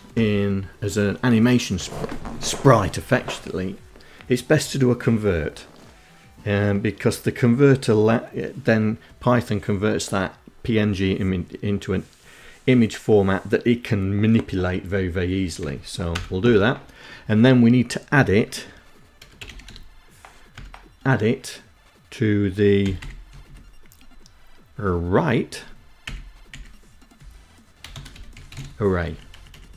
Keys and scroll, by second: 15.3 Return, 18.1-19.3 typing, 19.7 Tab, 22.0 [, 22.2 ], 22.6 Left, 25.2 ', 26.3 Left, 26.9-28.2 typing, 28.2 Right, 28.5 Right, 28.6 Down, 29.3 Left.